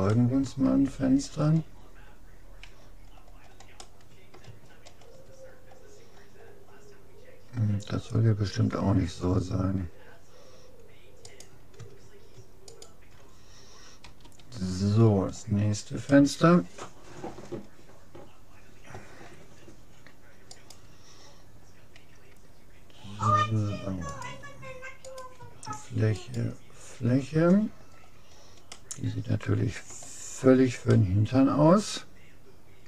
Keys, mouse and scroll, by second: 0.1-1.3 middle drag, 1.9-3.9 middle drag, 2.7 a, 5.7-9.5 middle drag, 11.3-14.3 right drag, 14.1 f, 14.7-15.7 middle drag, 20.5-22.3 right drag, 24.1-25.9 drag, 25.1-27.9 right drag, 27.9 middle click, 28.7-30.5 middle drag, 30.9-32.7 middle drag.